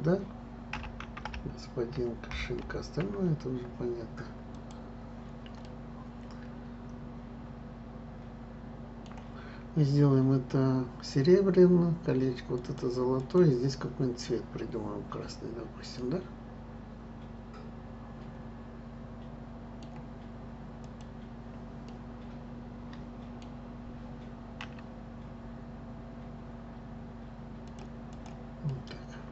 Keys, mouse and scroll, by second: 5.6-8.7 middle drag, 12.5 click, 13.2 click, 16.0-19.0 middle drag, 20.8 click, 21.8-24.6 middle drag, 24.6 s, 28.0 click, 28.7-29.3 middle drag.